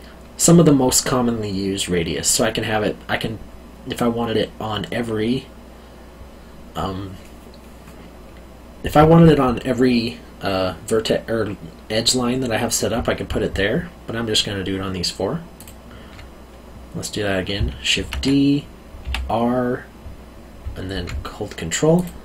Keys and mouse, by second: 15.5 ctrl+click, 17.9 shift+d, 19.0 r, 21.9 ctrl+click.